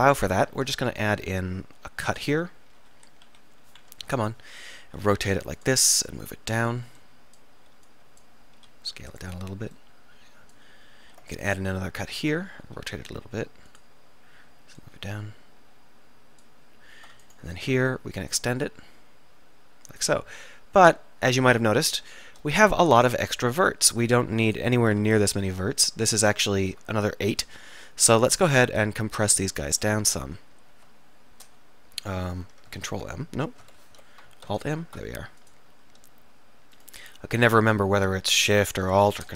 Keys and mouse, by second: 0.6 ctrl+r, 2.9 KP_1, 3.3 KP_7, 4.1 KP_3, 4.9 r, 6.5 click, 8.6 s, 11.1 ctrl+r, 12.4-14.3 drag, 12.7 r, 14.9-16.0 drag, 17.8 e, 20.5-21.6 drag, 22.7 x, 25.3 click, 29.9 click, 30.3-32.9 middle drag, 31.5 m, 32.9 ctrl+m, 33.9 Escape, 34.5 Escape, 34.5 alt+m.